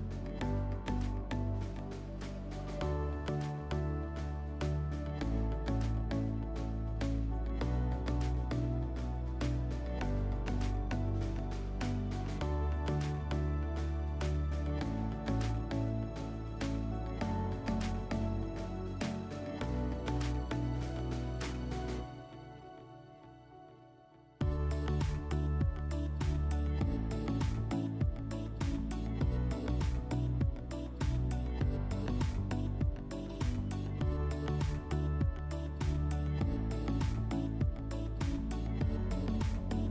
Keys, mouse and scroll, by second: 1.1 click, 1.8 click, 2.4 click, 3.0 click, 3.4 click, 4.0 click, 4.6 click, 5.0 click, 5.5 click, 6.0 click, 6.4 click, 7.0 click, 7.5 click, 8.0 click, 8.5 click, 10.0 click, 11.1 scroll, 11.7 click, 14.4 click, 15.9 click, 17.2 click, 18.2 click, 20.7 click, 22.0 click, 25.7 click, 27.0 middle click, 27.8 scroll, 28.3 middle click, 31.8-33.4 drag, 33.9 click, 35.8 click, 36.8 click, 38.1 click, 39.3 click.